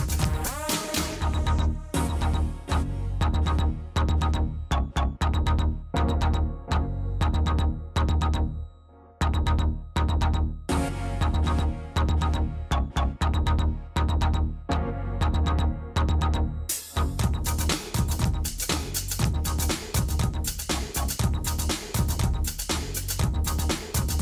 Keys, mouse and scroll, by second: 0.7-2.3 drag, 1.4 s, 3.5 s, 5.0 click, 5.7 Tab, 7.5 click, 8.0 middle click, 9.2 Tab, 9.4-11.5 middle drag, 11.5 click, 11.8 Tab, 12.0 middle click, 12.6 middle click, 13.2 middle click, 13.8-17.0 middle drag, 14.0 s, 16.6 Tab, 18.2 Tab, 20.8 a, 21.8 click, 22.8 click.